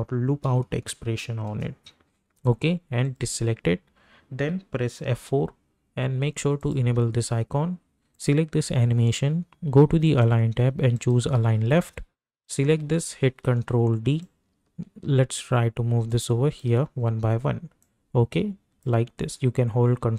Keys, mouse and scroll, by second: 0.0-0.2 typing, 0.4 Down, 1.6 Return, 3.0 click, 5.1 F4, 6.6 click, 10.9 click, 13.4 ctrl+d, 14.5-16.7 ctrl+drag, 18.1-19.0 ctrl+drag.